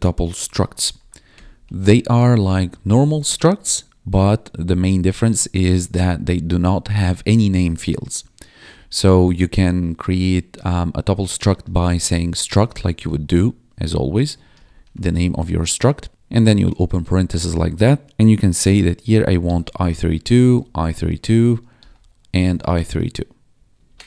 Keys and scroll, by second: 0.0-4.0 typing, 8.6 Return, 10.2 ctrl+Down, 11.2-13.2 typing, 14.3-16.4 typing, 19.2-22.4 typing, 22.4 ctrl+s, 22.7 Right, 23.5 Left, 23.8 alt+shift+Down.